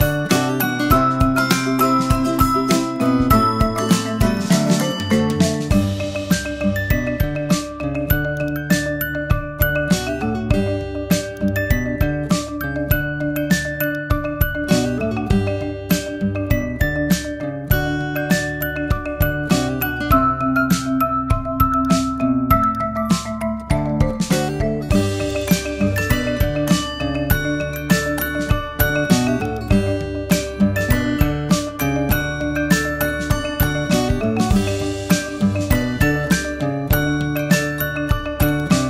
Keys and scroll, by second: 1.5 super+t, 25.8 super+t.